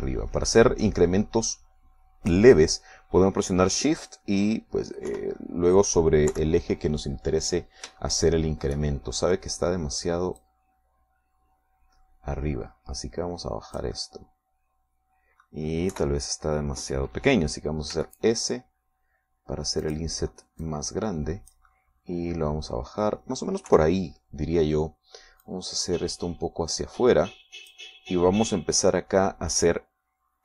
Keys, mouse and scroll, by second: 6.3 KP_1, 7.5 KP_3, 9.3 shift+middle click, 12.1-16.9 drag, 15.2-16.9 middle drag, 17.2 KP_3, 19.2 s, 21.1 click, 21.9-24.8 drag, 24.9 KP_3, 26.7-29.2 drag.